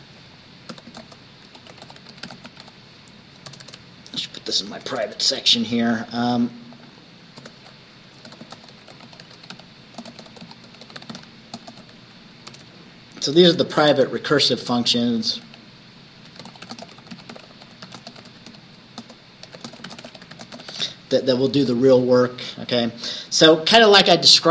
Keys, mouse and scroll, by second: 0.0 Return, 0.3 click, 0.8-3.6 typing, 6.8 click, 7.5 Return, 8.1-12.6 typing, 14.3-21.4 typing, 21.7 Return, 22.3-24.5 drag.